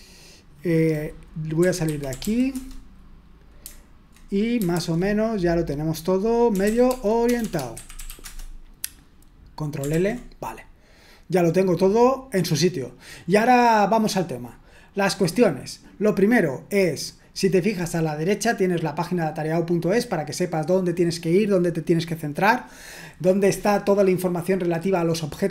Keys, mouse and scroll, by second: 1.9-2.7 typing, 4.7 super+h, 6.4-8.5 typing, 9.9 ctrl+l.